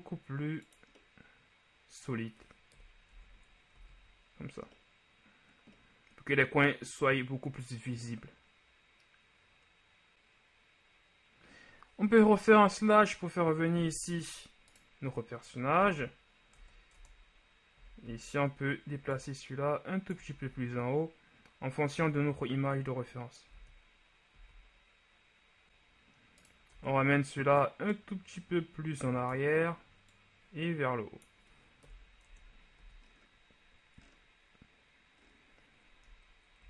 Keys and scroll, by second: 3.0 KP_1, 3.3 Tab, 3.9 a, 12.6 KP_Divide, 16.0 Tab, 16.7 Tab, 17.1 Tab, 17.9 a, 18.2 a, 20.5 shift+z, 23.6 shift+z, 24.4 z, 26.9 Tab, 32.0 KP_1, 32.4 Tab, 32.9 a.